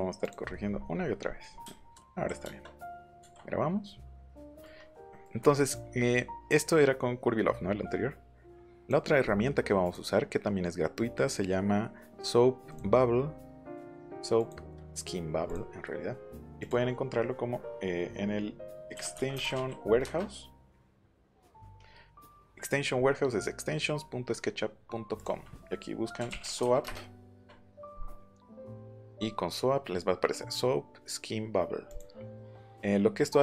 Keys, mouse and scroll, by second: 0.2 click, 0.4 middle click, 0.9 middle click, 1.2 middle click, 1.4 middle click, 1.6 space, 2.1 Escape, 4.4 middle click, 5.0 middle click, 8.7 click, 9.8 click, 12.7 click, 14.3 click, 15.4 click, 16.6 click, 18.9 e, 19.3 t, 20.0 Return, 25.1 click, 25.9-27.1 typing, 27.3 Caps_Lock, 31.8 click.